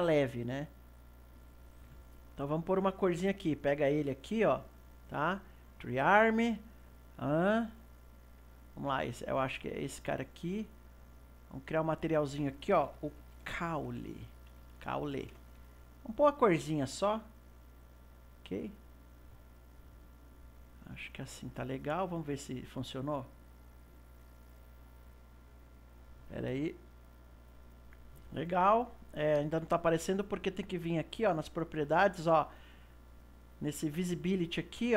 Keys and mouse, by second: 4.1-7.0 right drag, 9.2 click, 11.0-14.9 drag, 16.7 click, 22.6 click, 23.7 click, 27.3 click, 31.3 click, 33.4 click.